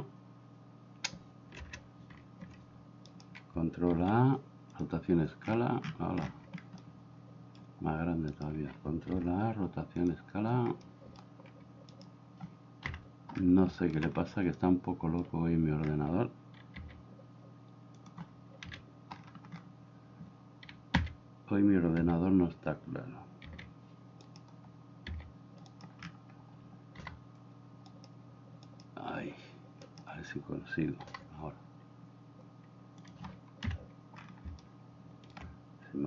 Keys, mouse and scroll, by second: 2.2 ctrl+z, 3.9 ctrl+a, 6.8-7.6 middle drag, 9.2 ctrl+a, 11.0 middle click, 12.9 KP_1, 13.8 shift+middle click, 14.6-15.3 middle drag, 16.8 s, 18.7 KP_7, 21.0 s, 22.1 s, 25.1 s, 27.0 g, 31.1 g, 33.7 KP_1, 34.6-35.3 shift+middle drag.